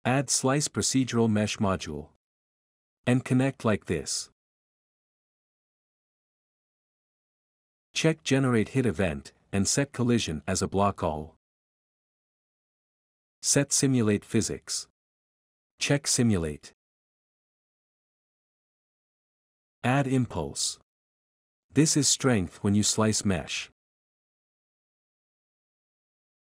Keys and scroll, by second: 1.0-2.2 typing, 2.9 Return, 14.3-16.5 typing, 20.7-22.5 typing, 25.4-26.5 typing.